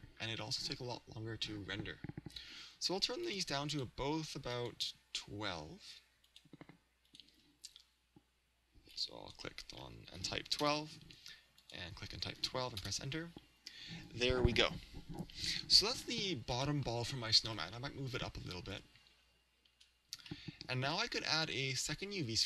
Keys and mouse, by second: 8.1 click, 11.6 click, 16.6-18.4 middle drag, 18.8 click, 20.4-22.2 middle drag.